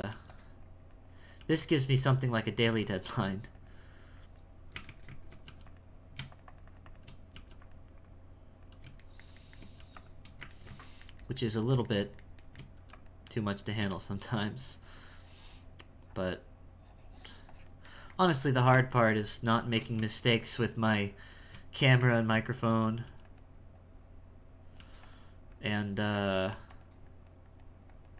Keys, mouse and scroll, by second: 0.6 click, 1.3 f, 1.8 f, 3.1-4.8 drag, 4.8 ctrl+z, 5.1 ctrl+z, 5.2 ctrl+z, 6.3-7.3 shift+drag, 7.3 f, 8.0-9.0 drag, 9.0 shift+middle click, 10.6-12.7 ctrl+shift+middle drag, 12.7 f, 13.3-18.0 drag, 18.0 shift+middle click, 18.5 f, 20.4-22.1 shift+drag, 22.1 ctrl+middle click, 23.8 click, 25.5 click, 27.1-28.1 drag.